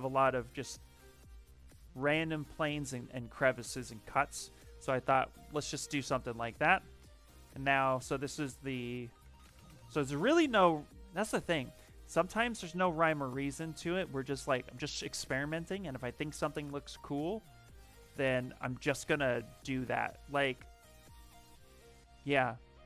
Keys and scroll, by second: 4.0 shift+f, 8.8-10.0 typing, 17.7 s, 18.1 n, 18.7 d, 18.9 Return.